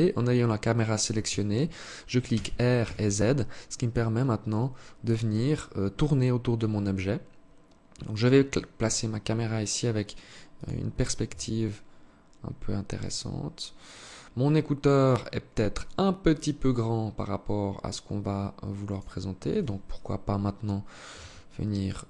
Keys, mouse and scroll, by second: 1.6 r, 10.6 g, 18.8 right click, 20.5 Tab, 21.5 s.